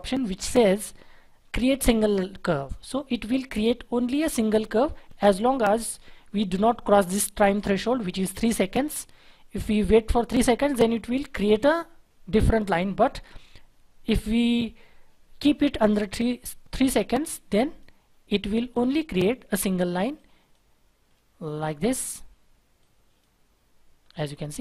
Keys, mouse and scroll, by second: 3.6-4.1 scroll down 1, 4.1-7.0 scroll up 1, 24.0-24.4 scroll down 1, 24.4-24.6 scroll up 1.